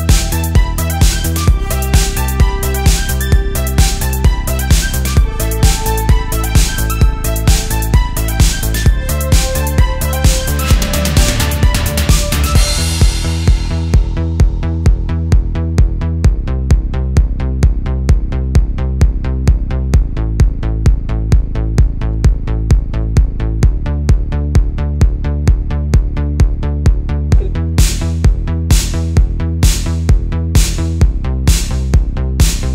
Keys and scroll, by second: 2.3 space, 2.7 space, 3.1 space, 8.5 space, 9.5 space, 9.9 space, 11.5 alt+super+space, 11.6 alt+super+space, 12.3 super+space, 13.1 space, 14.3 space, 19.8 space, 21.3 super+z, 23.1 super+z, 23.4 super+z, 24.8 space, 25.5 space, 27.3 space, 29.0 space, 30.1 super+z, 30.8 space, 31.4 super+space, 31.6 super+space.